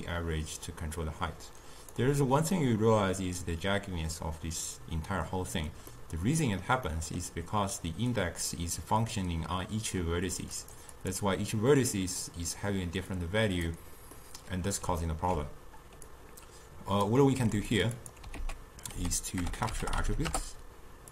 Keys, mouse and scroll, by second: 2.6-5.7 middle drag, 5.9-10.0 middle drag, 10.6 click, 11.0 click, 13.2 click, 14.2-16.1 middle drag, 16.1-17.4 drag, 17.4 g, 18.0 click, 18.4 ctrl+a.